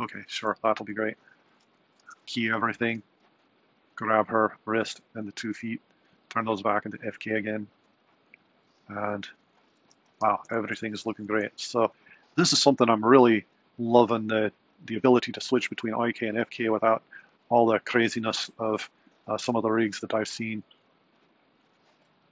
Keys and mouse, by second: 1.6 a, 1.9 i, 6.8 click, 9.9 a, 10.2 i, 11.1 alt+a, 21.6 click.